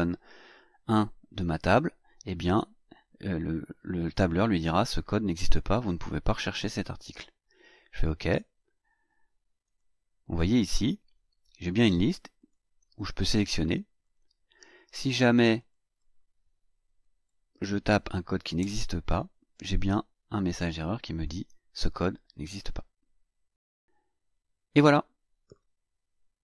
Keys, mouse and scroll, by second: 7.9 click, 9.6 click, 11.0-11.4 scroll down 2, 11.8 scroll down 2, 12.4 click, 14.0 click, 14.9 click, 15.4 click, 17.6 BackSpace, 18.6 Return, 20.6 click, 22.4 click.